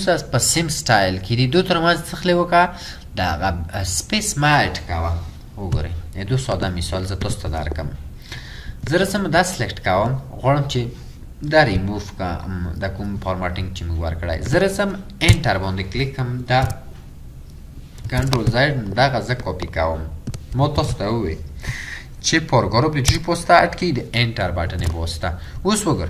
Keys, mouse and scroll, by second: 15.4 Return, 16.7 typing, 18.1 typing, 20.8 ctrl+c, 23.1 Return, 25.1 typing, 25.7-26.0 scroll down 1.